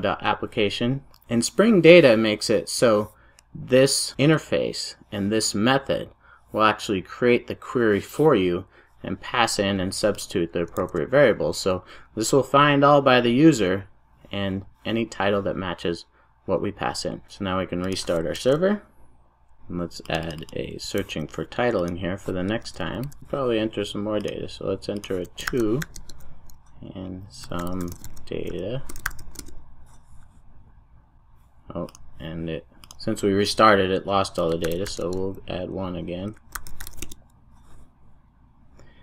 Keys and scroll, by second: 10.7 super+s, 23.0 super+v.